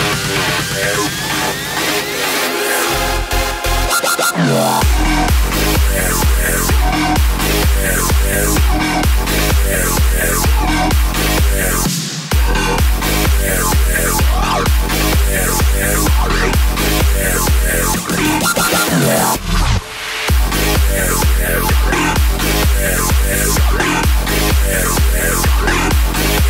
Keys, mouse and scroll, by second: 1.5 space, 2.7-6.3 drag, 11.0-12.1 right drag, 12.1-12.9 drag, 12.9 space, 15.7 space, 16.8-21.1 drag, 21.1 space.